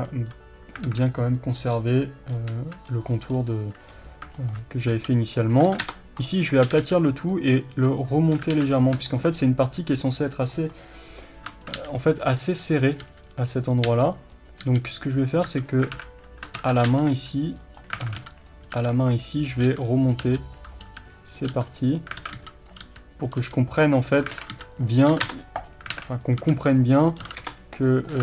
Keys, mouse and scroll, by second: 0.9 alt+a, 1.6 scroll down 1, 2.9-3.3 scroll up 1, 3.3-4.0 scroll down 1, 4.0-4.4 scroll up 1, 4.4-6.3 shift+middle drag, 5.3 b, 6.3 click, 6.7 g, 8.6 alt+a, 9.1-10.1 shift+middle drag, 9.4 scroll up 1, 10.1 click, 11.8 g, 12.8 click, 13.1 g, 13.6 click, 13.9 g, 14.5 click, 14.6 g, 16.0 alt+a, 16.6 ctrl+z, 16.9 g, 18.1 alt+a, 18.5 b, 19.7 g, 20.2 r, 20.5 click, 20.9 r, 21.5 g, 21.9 click, 22.2 alt+a, 22.7 b, 23.4 g, 24.4 alt+a, 24.8 b, 25.7 click, 26.0 alt+a, 26.1-26.8 scroll down 1, 26.8 b, 27.9 click, 28.1 scroll down 1.